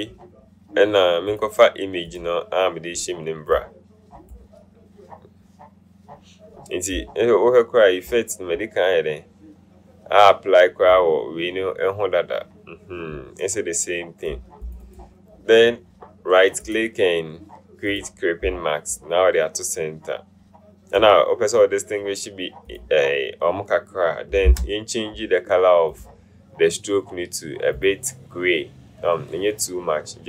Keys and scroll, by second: 24.9 u.